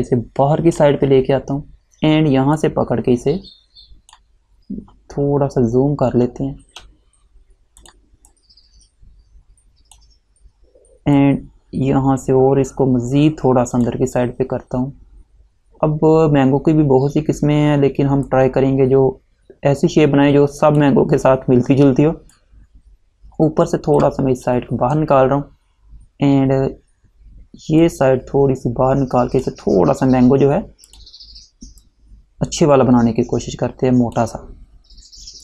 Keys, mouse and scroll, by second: 5.3 alt+scroll up 1, 5.9 alt+scroll up 1, 6.7 space, 7.9 click, 18.4 click, 27.9 click.